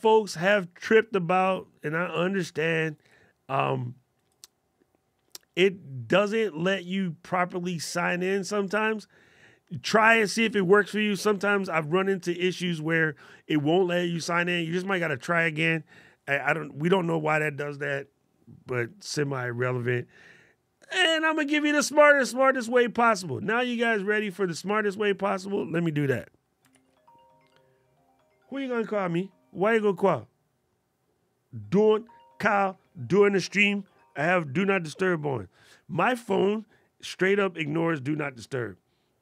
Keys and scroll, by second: 26.4 super+l.